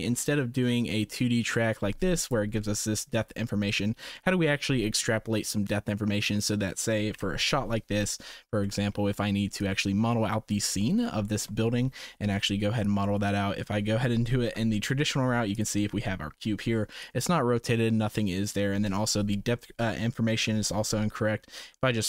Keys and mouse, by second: 2.2 click, 2.6-3.1 right drag, 3.3-3.9 shift+right drag, 4.1 right click, 7.1 KP_0, 8.7 shift+middle drag, 9.5-10.3 drag, 11.2 shift+middle click, 12.8 middle drag, 14.4 shift+a, 21.0 r.